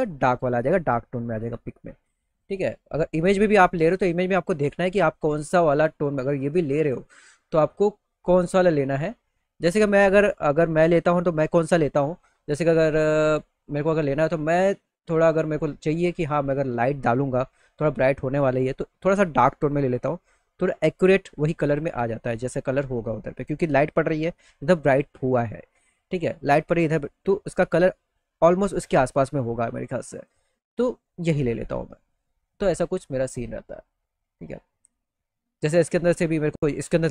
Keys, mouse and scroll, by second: 1.9 click, 2.7 middle click, 8.6 click, 12.2 click, 12.6 click, 19.1 click, 19.1 right click, 23.9 middle click, 25.4 middle click, 29.8 click, 32.6 click, 35.6 middle click, 36.2 middle click.